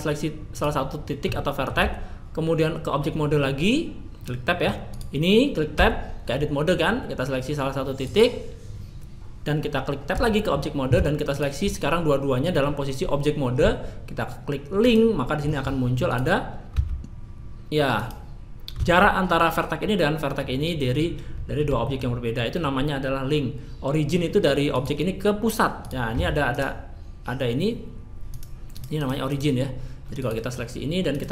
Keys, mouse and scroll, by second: 1.8 Tab, 1.8-5.0 middle drag, 5.0-10.1 right drag, 5.7 Tab, 10.1 Tab, 16.7-18.0 right drag, 16.7 g, 17.1 middle click, 21.8-26.1 middle drag, 26.1-31.3 right drag, 26.1 g.